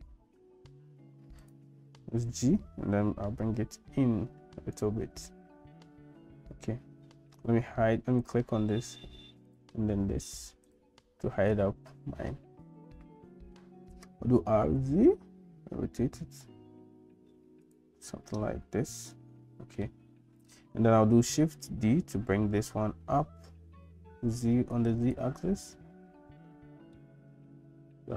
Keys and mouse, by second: 2.2 g, 8.2 click, 9.5 click, 10.7 click, 14.2 r, 19.1 middle click, 21.7 shift+d, 26.9-28.1 shift+middle drag.